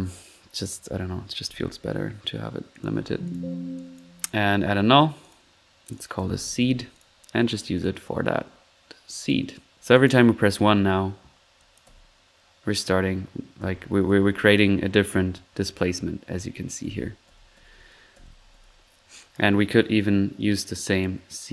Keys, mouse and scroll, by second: 0.0-0.7 typing, 2.7-3.1 alt+drag, 2.9 typing, 3.4 drag, 3.7 click, 5.2 click, 5.8 click, 7.9 click, 9.1 click, 9.3-11.8 typing, 10.1 click, 10.4 click, 11.5-12.1 drag, 13.5-19.6 typing, 14.6 middle click, 18.8 middle click, 19.1 click, 19.2 click, 20.5 click, 21.4 click.